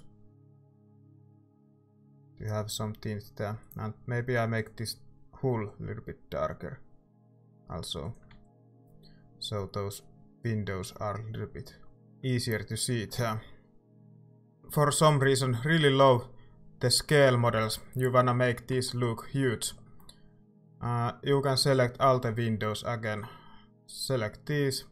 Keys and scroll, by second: 8.5 ctrl+s, 17.6 z, 18.7 Tab.